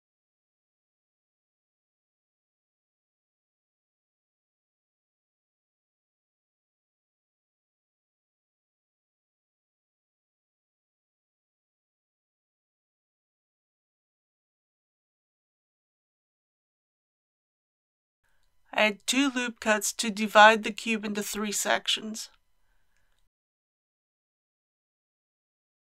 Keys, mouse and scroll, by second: 1.5 KP_3, 2.1 scroll up 1, 3.5 s, 4.9 y, 6.2 click, 6.8 g, 7.4 y, 10.7 click, 14.6 KP_1, 16.5 shift+middle click, 18.8 ctrl+r, 19.5-20.2 scroll up 1, 21.0 click.